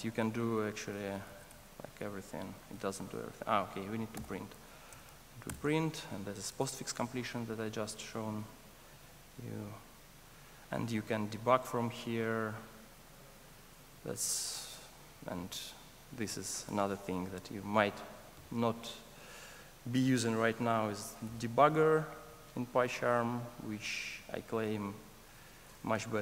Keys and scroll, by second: 2.4 Return, 3.3 Escape, 5.5 Return, 6.8 super+s, 9.0 super+s, 9.1 ctrl+r, 12.8 ctrl+d, 18.7 F8, 21.3 F8.